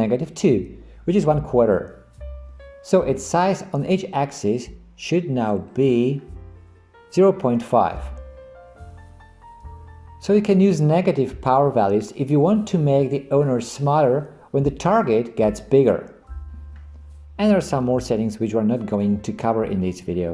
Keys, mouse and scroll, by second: 5.6 click.